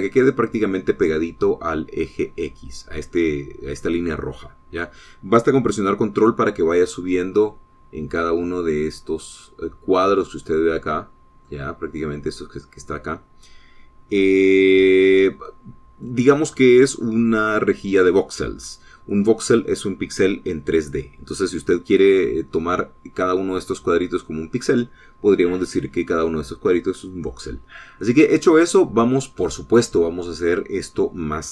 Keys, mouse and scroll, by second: 0.2 ctrl+click, 0.8-1.2 ctrl+scroll up 2, 11.3-12.5 middle drag, 14.9-17.0 middle drag, 28.4 scroll down 2, 29.0-30.4 middle drag.